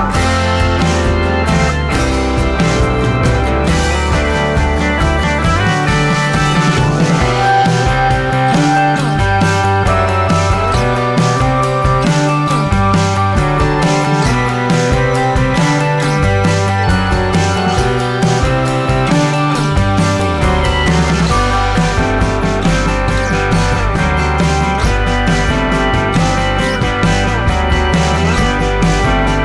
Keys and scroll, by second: 27.5 ctrl+alt+s.